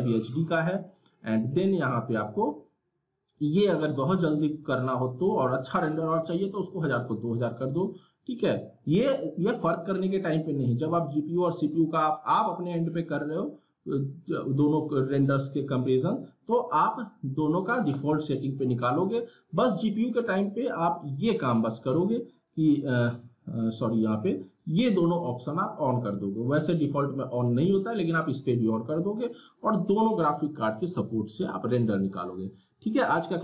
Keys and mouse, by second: 0.8 click, 3.4-11.6 drag, 17.0 click, 20.6 click, 26.0 click.